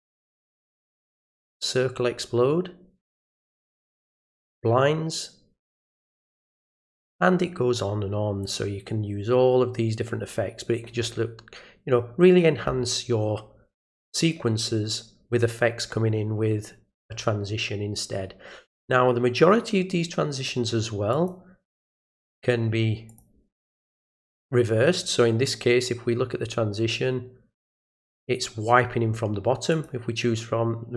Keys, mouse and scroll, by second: 0.2 click, 1.5 click, 3.1 click, 4.4 click, 6.3 click, 8.4 click, 21.1 click, 23.1 click, 29.7 click.